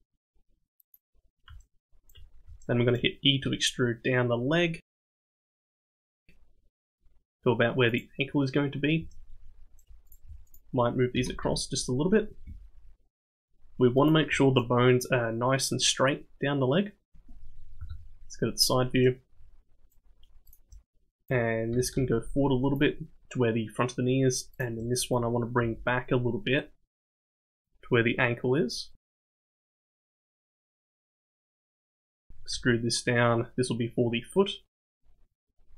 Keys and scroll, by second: 3.4 e, 11.1 g, 17.8 KP_3, 21.7 g, 25.6 g, 32.5 e.